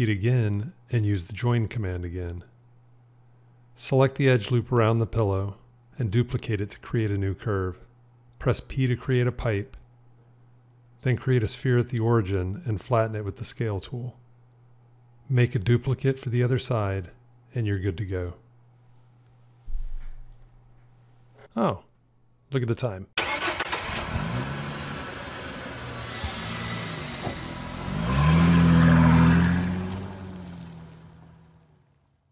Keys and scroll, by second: 2.4 j, 5.9 shift+d, 8.9 p.